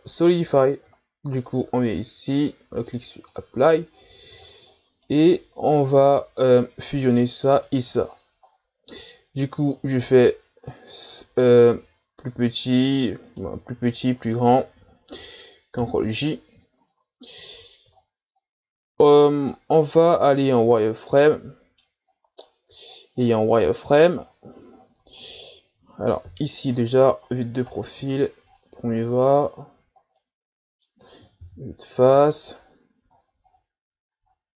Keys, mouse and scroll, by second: 2.3-3.9 drag, 3.9-5.0 scroll down 15, 5.0-5.6 middle drag, 5.6-6.5 scroll up 13, 6.5-7.0 ctrl+scroll down 1, 7.0 right click, 7.6 right click, 8.0-8.8 scroll down 2, 9.4-10.1 ctrl+scroll up 6, 10.8 right click, 11.4 right click, 13.3 right click, 14.0 shift+right click, 16.0 ctrl+j, 16.8-17.2 shift+scroll down 3, 17.2-17.5 scroll up 2, 17.5 Tab, 18.0-18.3 shift+scroll down 5, 18.3-19.6 scroll up 5, 20.7 z, 21.2 middle click, 22.0-22.9 scroll down 7, 23.0-23.5 ctrl+scroll down 10, 23.6-24.2 scroll up 7, 24.2-24.8 ctrl+scroll down 6, 25.1-26.3 scroll up 1, 26.3 KP_3, 26.9-28.5 scroll down 19, 28.5-28.8 ctrl+scroll up 9, 28.9 shift+scroll down 7, 29.4 scroll up 6, 30.1-31.4 middle drag, 31.4 KP_1, 32.2-33.1 scroll down 10, 33.5-34.1 scroll up 9, 34.2-34.5 ctrl+scroll down 14.